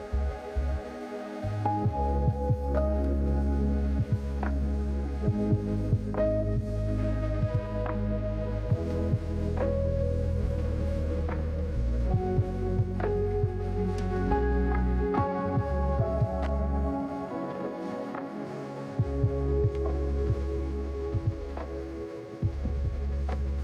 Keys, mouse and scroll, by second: 16.5 click, 22.3 click, 22.5 click.